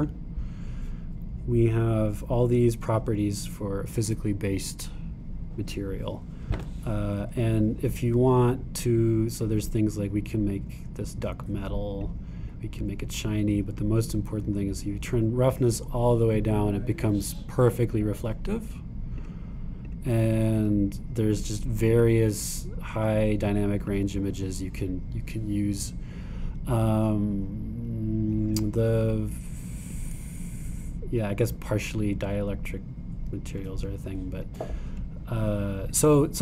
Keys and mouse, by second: 1.1-2.9 drag, 11.3 right click, 11.8 click, 13.9 click, 17.8-19.8 drag, 30.0-33.8 drag.